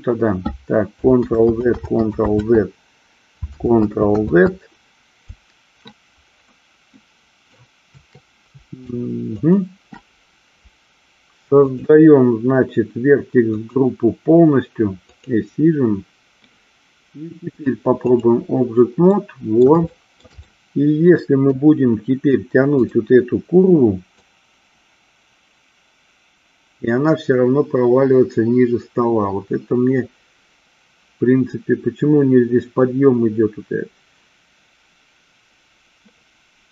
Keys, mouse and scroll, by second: 1.3 ctrl+z, 1.8 ctrl+z, 2.3 ctrl+z, 3.6 ctrl+z, 4.2 ctrl+z, 7.1 middle click, 9.4 alt+shift+click, 11.7 click, 13.8 click, 15.2 click, 17.6-18.4 drag, 19.2 middle click, 20.0 shift+middle click, 20.6-21.7 middle drag, 23.0 click, 24.3-36.7 drag.